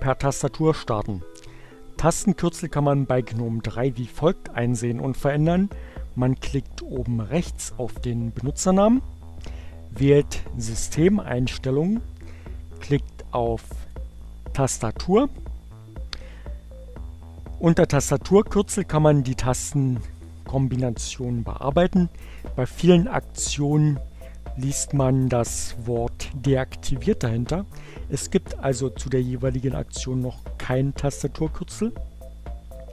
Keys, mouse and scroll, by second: 7.2 click, 10.5-12.1 drag, 13.8 click, 19.5 click, 23.9 click.